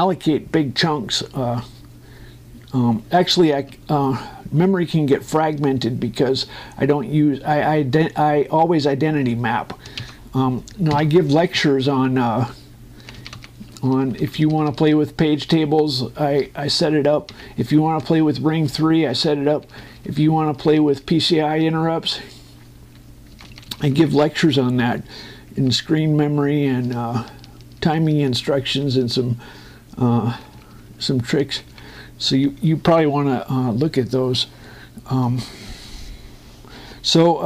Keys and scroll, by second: 10.7 ctrl+Down, 12.4 Down, 14.5 Up, 15.8 space, 16.9 shift+Escape, 18.7 space, 19.9 shift+Escape, 24.0 Down, 27.5 Up, 31.0 Down.